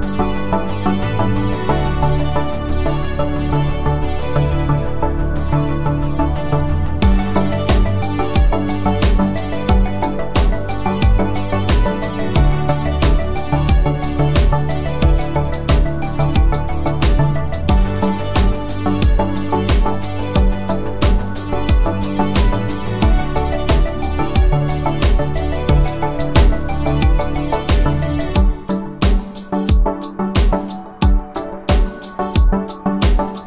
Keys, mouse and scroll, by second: 0.8 click, 3.8 u, 5.2 click, 14.3 alt+click, 19.5 click, 21.8-23.6 click, 24.6 right click, 26.6 click, 30.0 click.